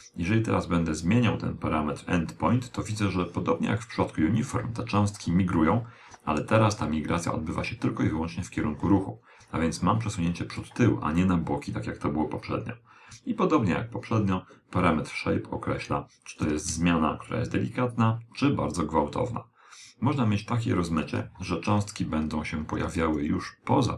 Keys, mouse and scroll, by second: 12.1 click, 19.4-21.3 middle drag.